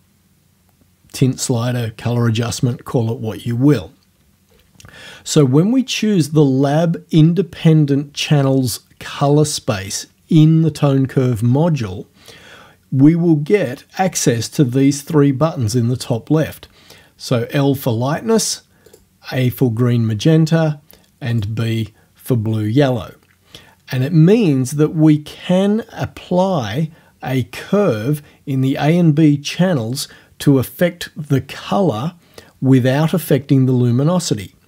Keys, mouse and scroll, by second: 18.9 click, 21.4 click.